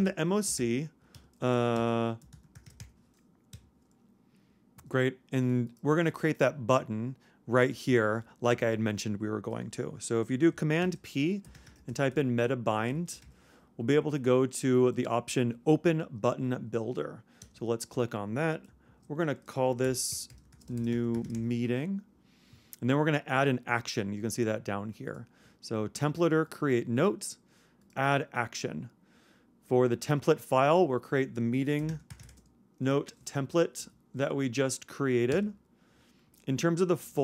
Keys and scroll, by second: 0.5 super+m, 1.5 super+Escape, 1.8 super+o, 2.2 super+m, 10.8 super+p, 11.4 super+m, 18.9 shift+super+Left, 19.8 shift+super+m, 20.0-21.4 typing.